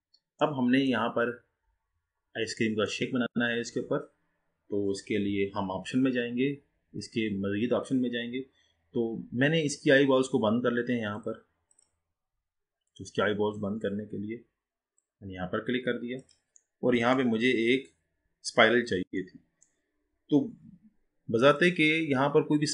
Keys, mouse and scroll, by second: 0.0-0.5 scroll down 1, 0.5-1.2 middle drag, 1.2-1.7 scroll down 4, 1.7-2.6 scroll up 3, 2.6-5.7 middle drag, 11.2 click, 15.0 click, 16.3 click, 16.8-17.7 middle drag, 17.7-18.5 scroll up 2, 18.5-19.3 scroll up 2, 19.3-21.5 middle drag, 21.5-22.7 drag.